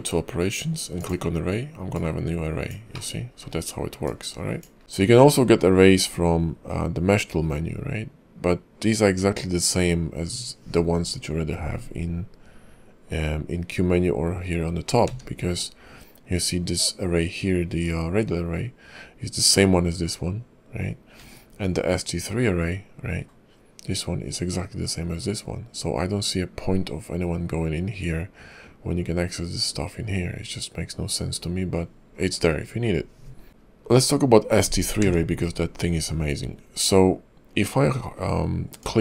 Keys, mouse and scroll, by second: 5.3 q, 15.0 q, 21.2 q, 33.6 shift+middle click, 33.6 scroll down 2, 35.0 q.